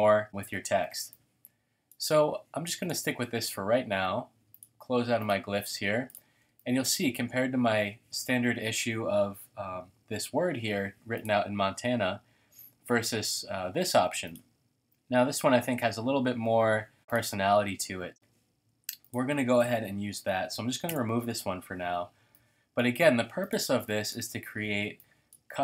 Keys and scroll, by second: 0.5 v, 0.9 space, 1.4 space, 1.5 space, 20.9 BackSpace, 23.7 space.